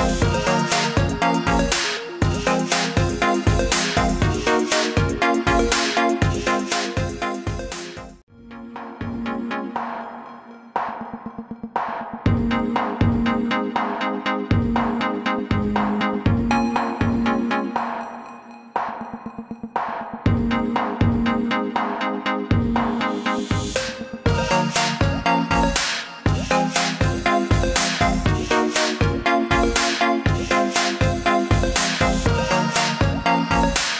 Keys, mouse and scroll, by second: 12.5 click, 17.7 alt+click, 19.2 alt+click, 23.1 ctrl+z, 23.8 click.